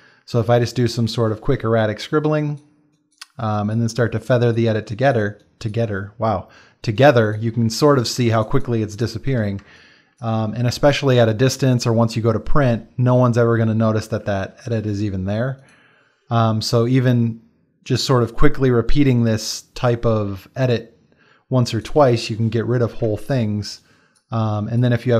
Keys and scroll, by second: 8.2 space, 9.6 space, 23.0 space.